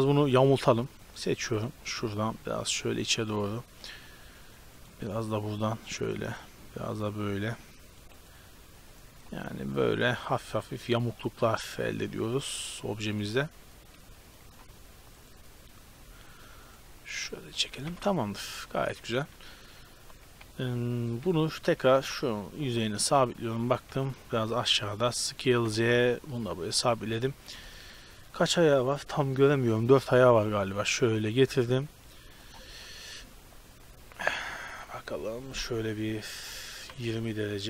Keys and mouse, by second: 0.0 z, 2.4 middle click, 3.7-4.7 drag, 4.7 middle click, 5.5 right click, 8.7-9.7 middle drag, 9.7 right click, 10.1-10.5 drag, 10.5 middle click, 12.1 middle click, 13.1-14.5 middle drag, 17.9 Tab, 18.3-19.3 middle drag, 20.1 g, 21.8 g, 23.3 middle click, 23.9 Tab, 24.7 Tab, 25.7 s, 29.4 KP_7, 29.9 z, 30.5 g, 32.0 r, 33.9 KP_3, 34.9 KP_1, 35.7 r.